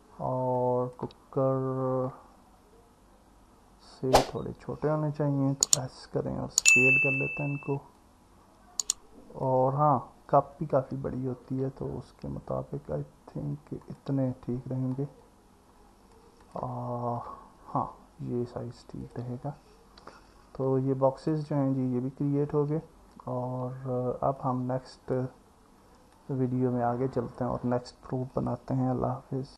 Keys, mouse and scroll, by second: 0.6 click, 5.6 s, 11.5 s, 13.8 click, 16.5 click, 20.2-21.3 alt+middle drag, 24.6-25.2 drag, 26.2 click.